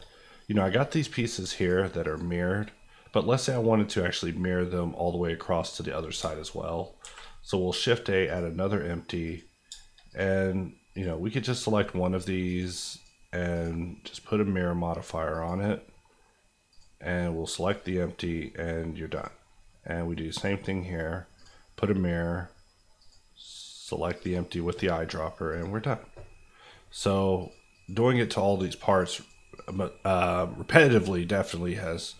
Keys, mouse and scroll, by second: 0.1 middle click, 1.1 click, 1.6 shift+click, 2.0 shift+click, 2.7 click, 6.2 shift+click, 7.0 shift+a, 8.2 click, 9.6 shift+click, 10.0 click, 22.3-23.0 scroll down 1, 23.0 click, 26.7-27.4 scroll up 1, 27.4 click.